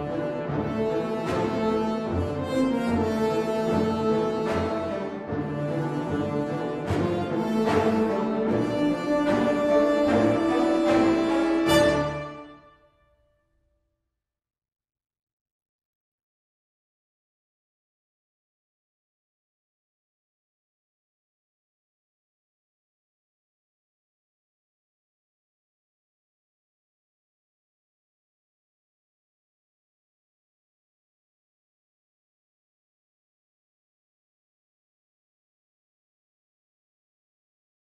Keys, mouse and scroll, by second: 0.2-0.6 scroll up 7, 0.7 middle click, 2.3 click, 4.1 click, 5.2 click, 5.2 middle click, 6.2 click, 6.6 shift+middle click, 6.9 middle click, 7.3-8.2 scroll up 3, 7.5 Tab, 8.2 click, 9.3 click, 10.4 click, 11.8 click, 12.0 shift+click, 14.4 ctrl+b, 17.3 middle click, 18.4 click, 20.1 ctrl+b, 24.5 middle click, 25.1 scroll down 3, 25.2 Tab, 25.5 middle click, 27.6 scroll down 3, 28.0 shift+middle click, 28.3 middle click, 28.6 middle click, 28.7 shift+middle click, 29.7-30.2 scroll up 3, 30.1 middle click, 32.4 shift+a, 36.3 s.